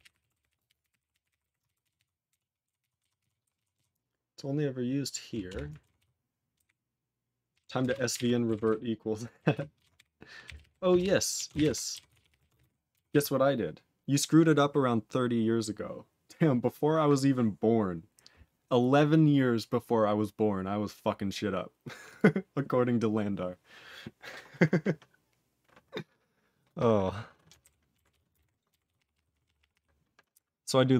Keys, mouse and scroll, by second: 0.0-1.9 typing, 1.9 ctrl+s, 2.3 ctrl+s, 2.6 ctrl+s, 2.8 ctrl+s, 3.0 ctrl+s, 3.2 ctrl+s, 3.4 ctrl+s, 3.5 ctrl+s, 3.7 ctrl+s, 5.4 Return, 5.9 ctrl+s, 6.6 ctrl+b, 7.5 ctrl+e, 7.8 ctrl+a, 8.1 ctrl+g, 8.1 ctrl+e, 8.6 ctrl+s, 9.5 ctrl+s, 11.0 ctrl+Return, 11.3 ctrl+a, 11.5 ctrl+space, 11.5 ctrl+e, 11.6 ctrl+g, 12.0 ctrl+s, 12.1 ctrl+p, 12.2 ctrl+p, 12.3 ctrl+a, 12.5 ctrl+e, 12.6 ctrl+g, 13.0 ctrl+s, 20.0-20.9 scroll up 3, 21.2-22.0 scroll up 1, 22.0 click, 22.1 click, 27.6 ctrl+k, 28.1 ctrl+s, 28.3 ctrl+space, 28.3 ctrl+e, 28.3 ctrl+g, 28.8 ctrl+s, 29.1 ctrl+p, 29.3 ctrl+p, 29.4 ctrl+p, 29.6 ctrl+p, 29.7 ctrl+p, 30.3-30.9 ctrl+n.